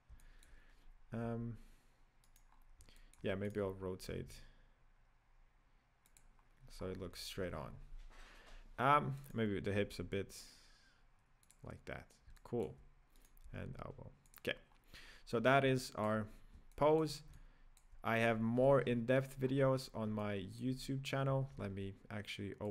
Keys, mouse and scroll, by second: 0.2-1.5 shift+middle drag, 1.5 s, 2.8 scroll down 4, 3.0-3.8 shift+middle drag, 3.8 right click, 3.9-4.4 scroll up 1, 4.4 r, 6.9-7.2 scroll down 2, 7.2-7.6 shift+middle drag, 7.6-9.5 scroll up 5, 9.5 right drag, 10.0 r, 12.4-13.5 middle drag, 13.5 right click, 13.7 g, 14.7-15.4 scroll down 2, 15.4-15.8 scroll down 5, 15.8-16.3 shift+middle drag, 16.3-16.7 scroll down 3, 16.7-18.7 shift+middle drag, 18.7 KP_1, 19.5-20.2 scroll up 5, 20.2 shift+middle click, 21.0-22.7 scroll up 1.